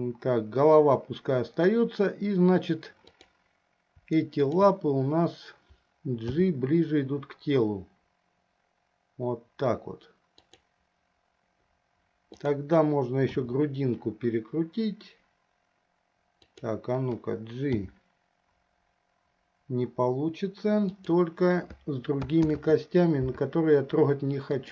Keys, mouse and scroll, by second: 3.2 click, 4.8 shift+click, 6.5 g, 13.6 r, 18.1 g, 22.7 ctrl+z, 24.6 click.